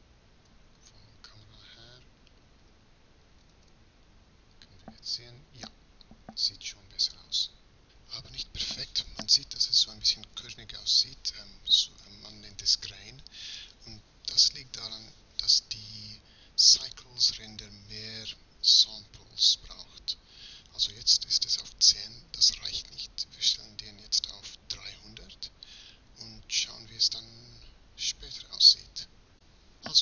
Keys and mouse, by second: 1.6 z, 3.2 shift+z, 6.1-26.3 middle drag, 26.3 0.